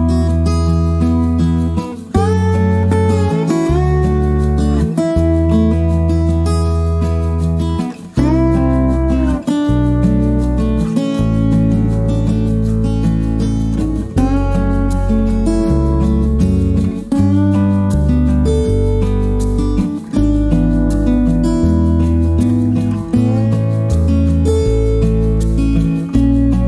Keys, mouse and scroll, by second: 0.3-4.0 shift+drag, 5.5 right click, 6.6 click, 9.2-12.6 shift+drag, 14.1 shift+click, 15.7 click, 16.8 click, 19.1 click, 20.9 click, 21.4 click, 23.5 click, 24.3 right click.